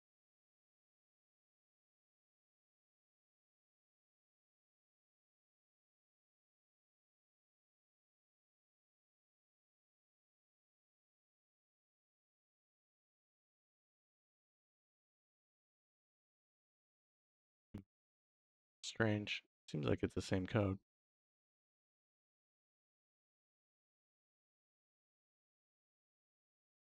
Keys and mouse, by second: 4.8 middle click, 5.5 middle click, 6.9-10.8 drag, 11.7 middle click, 12.3 middle click, 14.5 click, 18.2 middle click, 19.0 middle click.